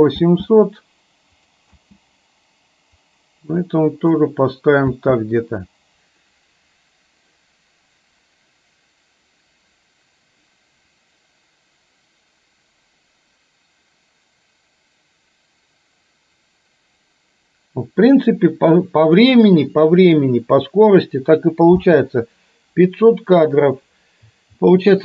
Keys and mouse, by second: 0.4 space, 1.9 space, 3.1-4.3 drag, 5.1 space, 21.9 space.